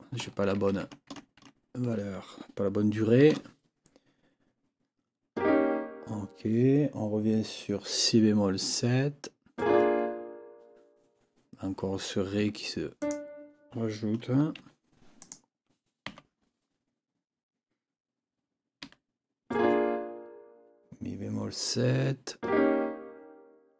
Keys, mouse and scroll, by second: 0.6 ctrl+z, 3.2 KP_7, 12.4 Escape, 13.0 click, 14.6 Delete, 15.2 click, 16.1 n, 18.8 7.